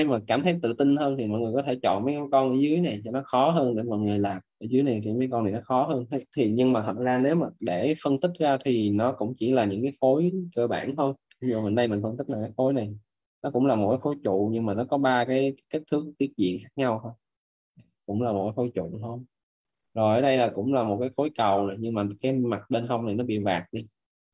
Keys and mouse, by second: 2.0 right click, 9.7 alt+`.